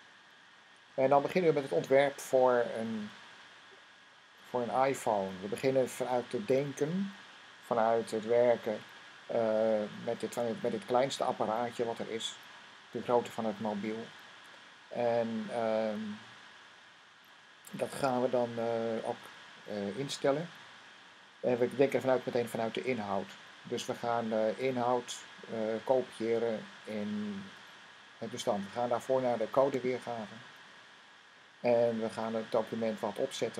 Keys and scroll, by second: 0.6 typing, 0.8 super+s.